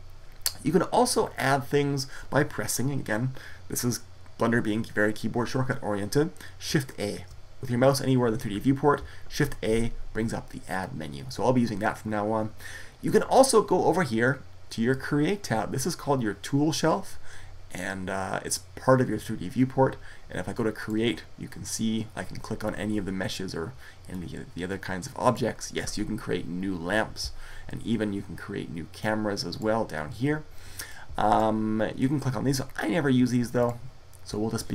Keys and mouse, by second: 9.1 shift+a, 20.6-23.7 drag, 23.9-25.9 drag, 28.8-30.6 drag, 30.7-32.5 drag, 33.4-34.7 drag.